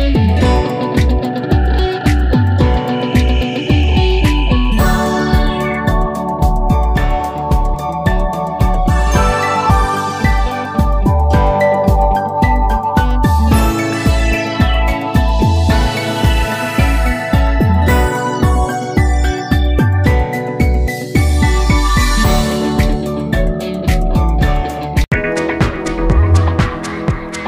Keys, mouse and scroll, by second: 2.9 click, 6.9 click, 8.0-11.2 alt+drag, 9.7 ctrl+j, 11.2 alt+click, 11.3 ctrl+j, 12.8 click, 13.0-16.5 drag, 20.9 click.